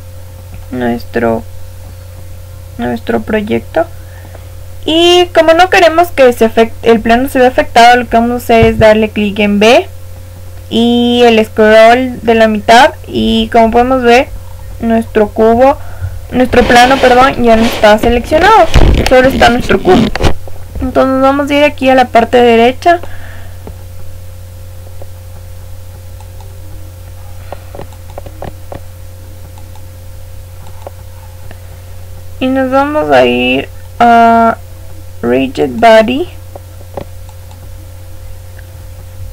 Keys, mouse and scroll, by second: 8.6 b, 13.3 middle click, 14.0-16.3 scroll up 1, 16.3-18.7 middle drag, 16.3-17.0 scroll up 1, 17.9-18.7 scroll up 1, 18.7-19.8 scroll up 1, 19.8-20.4 scroll up 1, 20.4-21.7 middle drag, 21.7 click, 26.1-32.5 drag, 33.8-37.2 middle drag, 35.6-39.0 drag.